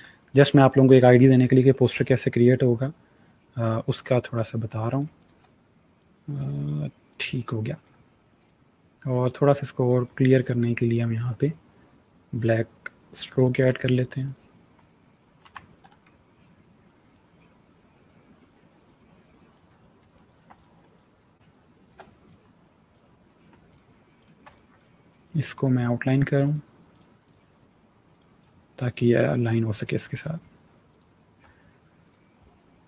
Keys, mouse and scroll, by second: 0.1 click, 4.7 click, 5.5 click, 15.3 v, 15.9 alt+scroll up 1, 16.5-17.0 scroll up 2, 17.0 alt+click, 19.9-20.5 alt+scroll down 2, 20.5 click, 20.7 space, 20.8 click, 21.2 space, 21.6 space, 22.1 click, 22.9 click, 24.7 click, 28.3 click.